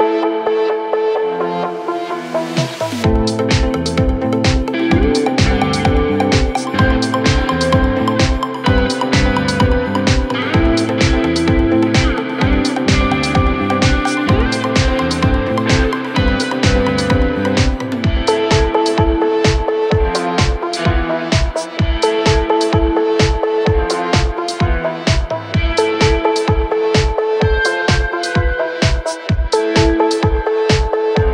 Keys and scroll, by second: 7.2 Delete, 9.2 ctrl+z, 9.9 Escape, 24.7 F3, 24.9 Escape.